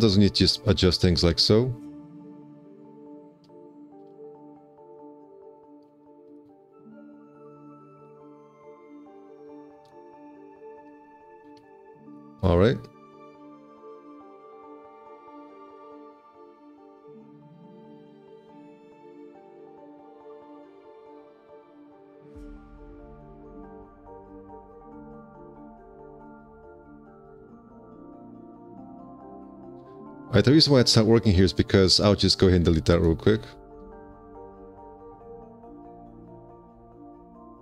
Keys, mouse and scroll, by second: 0.3 2, 1.2 w, 2.2 shift+v, 4.0 4, 4.3 q, 6.6 ctrl+space, 7.9 4, 9.3 F4, 11.4 F4, 13.4 alt+q, 15.3 alt+q, 16.1 1, 19.1 alt+c, 31.8 5, 32.0 x, 32.6 1, 34.5 ctrl+w, 35.5 alt+c.